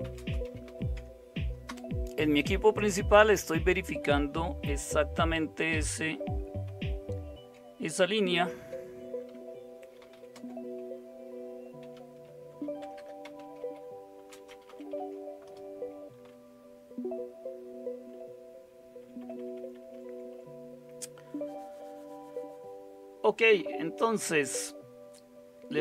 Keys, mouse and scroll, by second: 0.0-1.7 typing, 8.3 ctrl+x, 9.8-15.2 typing, 15.4 Return, 16.2 Down, 16.9 Down, 17.2-19.0 Down, 18.7-20.0 typing.